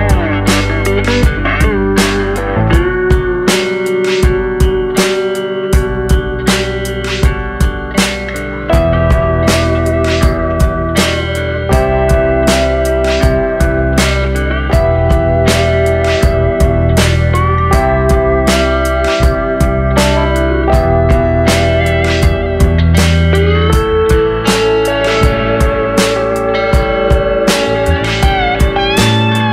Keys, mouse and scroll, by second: 1.1 middle click, 2.0-3.1 scroll up 2, 3.1 s, 6.2 middle click, 6.8 s, 7.6-8.0 scroll down 2, 8.0 shift+middle click, 8.7-9.7 scroll up 2, 9.7 e, 12.4 Tab, 13.5-15.6 drag, 16.4 Tab, 17.8-20.6 drag, 20.6 Tab, 20.7-21.2 scroll down 2, 21.2-22.4 shift+middle drag, 22.4 Tab, 24.0-26.8 drag, 27.0-27.3 scroll down 2, 27.3 shift+middle click, 27.7-28.5 scroll up 2, 28.5 click.